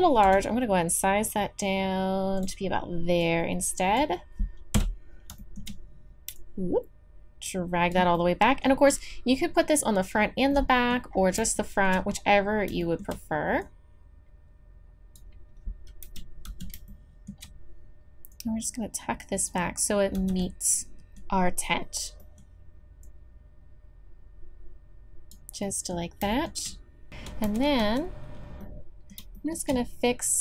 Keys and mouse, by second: 0.2 s, 3.2-4.4 drag, 4.7 KP_3, 13.6-16.0 drag, 16.0 KP_3, 16.5 z, 18.3-19.5 drag, 20.2 z, 24.6 click, 26.4 middle click, 26.5 middle click, 27.1 Tab, 27.8 z.